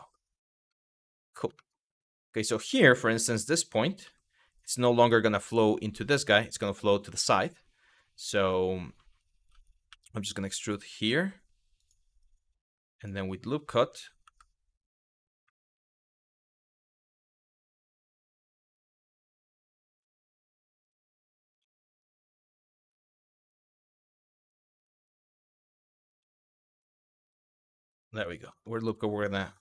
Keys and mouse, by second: 0.4 middle click, 1.2 middle click, 2.8 1, 3.7 g, 4.3 click, 9.5 e, 13.9 w, 15.1 q, 16.3 2, 17.6 click, 18.3 click, 19.6 ctrl+z, 20.1 click, 21.2 ctrl+z, 21.6 click, 23.6 click, 25.8 ctrl+z, 26.3 click, 26.9 click, 27.4 click, 28.2 shift+middle click, 29.2 2.